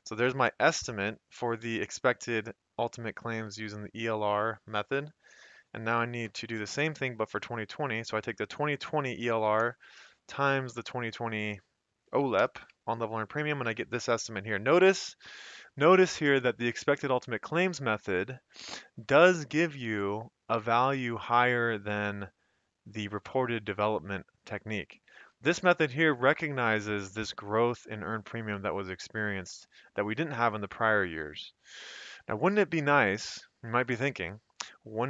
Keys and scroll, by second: 6.2 =, 9.6 *, 12.4 Return, 13.7 Up, 19.0 F2, 19.8 Escape, 25.3 F2, 26.1 Escape, 32.2 F2, 32.8 Escape, 33.4 F2, 33.8 Escape.